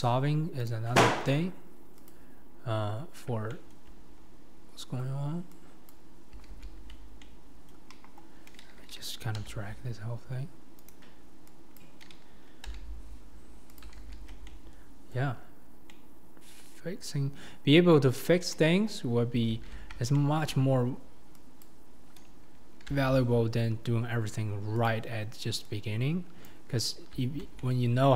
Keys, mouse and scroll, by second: 2.1 click, 3.5 shift+middle click, 5.9 click, 6.5 alt+z, 7.1 scroll up 1, 7.2 middle click, 7.9 KP_1, 9.4 g, 11.8 click, 12.8 g, 14.3 scroll down 2, 14.5 middle click, 15.3-15.9 scroll down 3, 15.9-18.5 middle drag, 18.5 KP_1, 19.1-19.5 scroll up 5, 19.5 alt+z, 19.9 scroll down 2, 20.1 shift+middle click, 20.6-21.4 scroll up 4, 21.4 scroll up 1, 21.6 click, 23.0 g, 26.5 click, 27.2 alt+scroll down 1, 27.6 middle click.